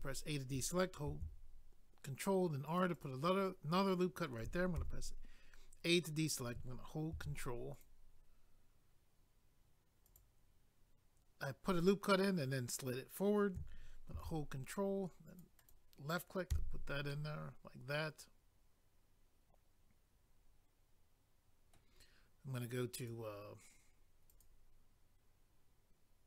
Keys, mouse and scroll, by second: 1.1 ctrl+r, 2.7 click, 2.8 click, 2.9 click, 3.0 double click, 4.8 a, 7.1 ctrl+r, 7.7 click, 7.8 click, 10.0 click, 10.1 click, 14.1 ctrl+r, 15.2 click, 15.4 click, 15.6 click, 15.7 double click, 16.5 a, 17.1 middle click, 23.0 click, 23.1 click, 24.3 click, 24.4 click.